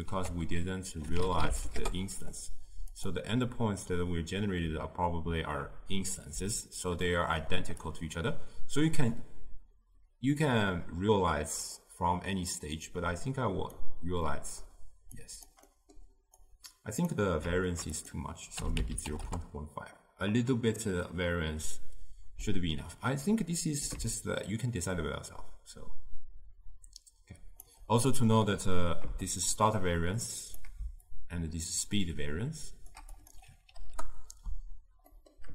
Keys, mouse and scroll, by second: 1.9 ctrl+a, 19.3-27.2 drag, 29.4-35.2 shift+drag, 35.2 middle click.